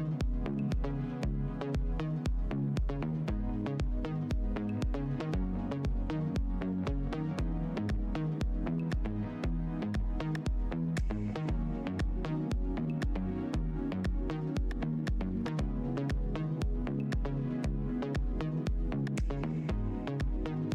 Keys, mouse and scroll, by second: 0.4 click, 0.9 shift+Tab, 1.0 shift+click, 2.6 shift+Tab, 3.4 shift+click, 4.6 shift+Tab, 4.7 shift+click, 5.2 z, 6.8 scroll down 1, 9.3 shift+click, 9.4 shift+Tab, 9.6 scroll up 1, 10.2 Tab, 10.7 Delete, 11.0 Tab, 11.9 Tab, 12.0 right click, 12.6 click, 12.7 click, 14.3 Tab, 14.6 right click, 17.2 Tab, 17.7 alt+click, 19.4 alt+click, 20.1 alt+click, 20.6 alt+click.